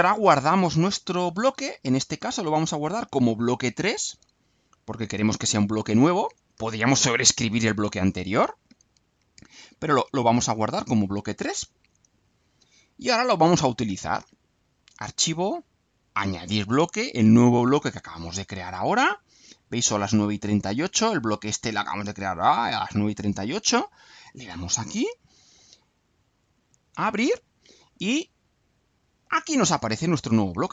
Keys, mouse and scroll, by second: 3.0 click, 5.7 click, 10.0 click, 11.0 click, 13.8 click, 16.4 click, 23.8 click, 25.2 alt+click, 25.4 alt+click, 26.3 click, 29.4 click.